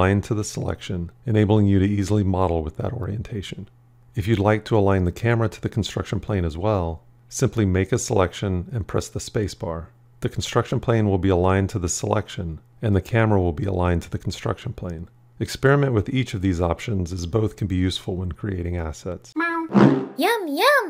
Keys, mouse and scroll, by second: 8.7 space.